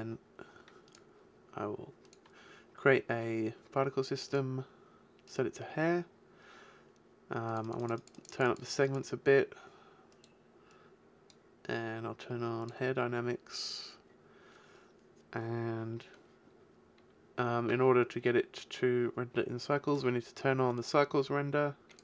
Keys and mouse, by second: 1.7 click, 4.0 middle click, 6.2-7.4 middle drag, 19.8-21.7 drag.